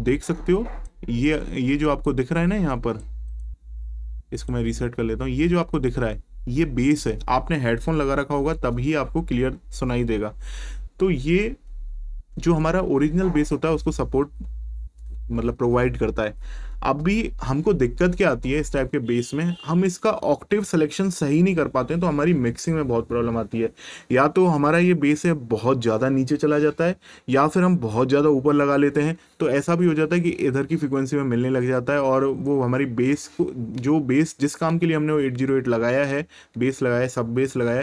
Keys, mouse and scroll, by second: 2.0 click, 3.3 right click, 4.3 click, 18.6 click.